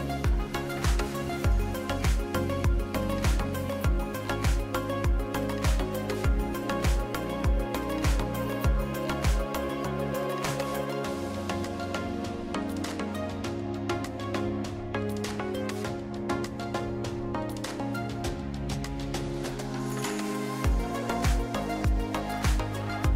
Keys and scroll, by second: 8.5 ctrl+KP_3, 9.1 e, 13.6 Tab, 16.3 Tab.